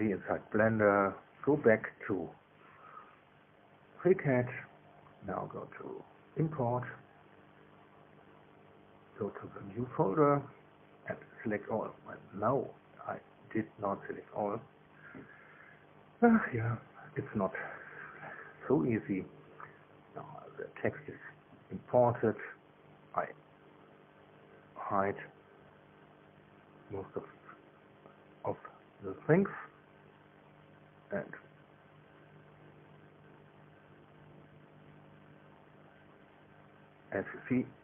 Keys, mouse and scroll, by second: 6.2 click, 8.2 click, 10.4 click, 10.8 click, 11.7 click, 12.5 shift+click, 17.0 click, 26.5 click, 27.1 space, 30.5 click, 31.1 space, 32.7 click, 33.2 space, 34.1 click, 34.2 space, 34.8 click, 35.1 space, 35.9 click, 37.2-37.8 middle drag.